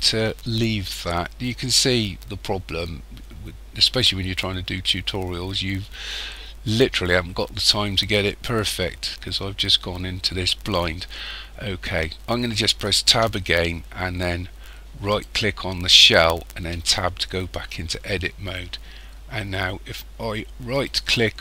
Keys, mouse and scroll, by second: 13.1 Tab, 15.1 right click, 16.8 Tab, 20.7 right click.